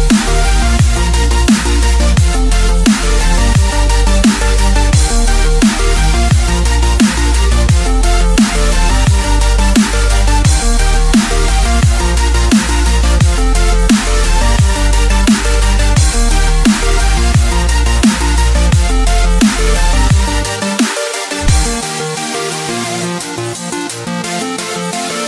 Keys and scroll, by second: 1.0 ctrl+0, 4.8 ctrl+0, 5.2 Return, 7.1 ctrl+space, 7.3 ctrl+space, 8.3 ctrl+0, 10.2 Return, 10.7 ctrl+0, 18.5 Delete, 24.3 Delete.